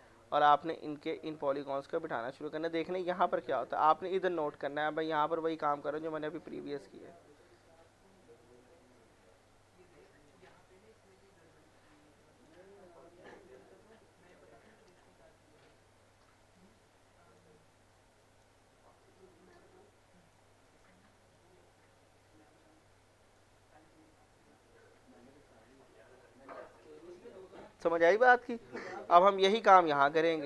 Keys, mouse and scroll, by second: 0.9 click, 2.1-2.5 scroll down 1, 2.8-3.2 scroll up 1, 4.4 middle click, 5.4 click, 7.3-7.6 scroll down 1, 7.6 middle click, 7.9-8.2 scroll up 1, 8.2 click, 10.5 scroll down 1, 11.1 middle click, 11.7 scroll up 1, 12.2 click, 15.2 scroll up 1, 16.5 click, 17.6 scroll down 1, 18.2 click, 18.7-19.5 scroll up 1, 19.5 click, 20.5 scroll up 1, 21.3 click, 23.5 scroll down 1, 24.1 middle click, 24.3 scroll up 1, 25.8 middle click, 28.5 scroll down 1, 29.1 alt+middle click, 29.8 scroll up 1, 30.1 middle click.